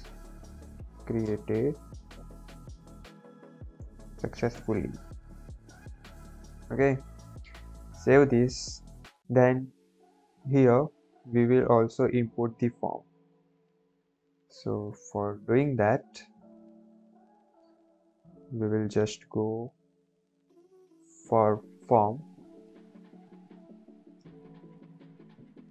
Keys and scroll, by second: 0.0-4.7 typing, 6.5 Left, 6.6 Left, 6.8 Left, 6.9 Left, 7.2 Right, 7.4 Right, 7.8 ctrl+s, 16.8 Down, 18.7 Left, 22.6 Down, 22.8 Right, 23.0 Right, 23.1 Right, 23.4 Right, 24.9 shift+[.